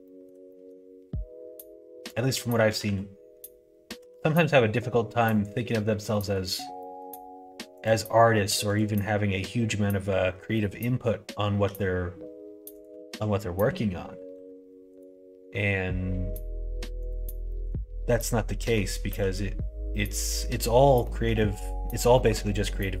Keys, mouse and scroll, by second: 0.0 shift+middle click, 0.4 middle click, 2.6 f, 2.8 f, 3.9 g, 6.0 middle click, 6.7-7.7 middle drag, 7.7 click, 8.6 click, 11.6 g, 12.9 ctrl+z, 14.3 ctrl+r, 17.0 click, 17.4 middle click, 18.5 middle click, 19.0 g, 21.0 scroll up 1, 21.1 middle click, 22.2 shift+middle click, 22.4-23.0 scroll up 2, 22.5 middle click.